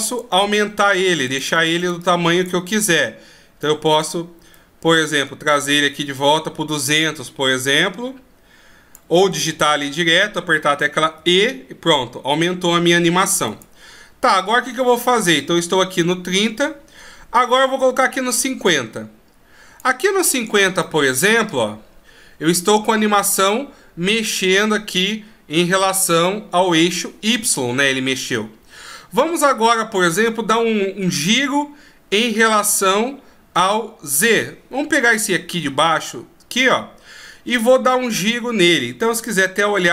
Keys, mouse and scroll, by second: 4.8 click, 13.8 click, 14.7 click, 21.1 middle click, 35.2 right click, 39.6 KP_7.